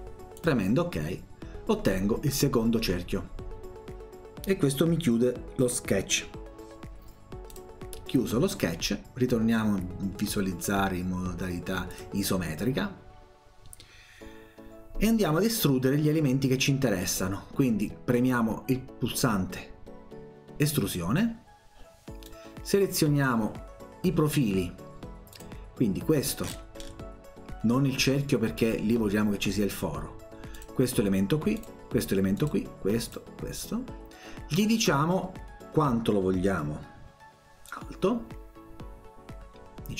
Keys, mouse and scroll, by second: 0.4 click, 7.5 click, 11.9 click, 20.7 click, 22.3-23.3 drag, 25.3 click, 26.1 scroll up 1, 26.4-26.9 scroll down 1, 30.6 click, 31.6 click, 32.3 click, 33.1 click, 37.7-39.9 drag.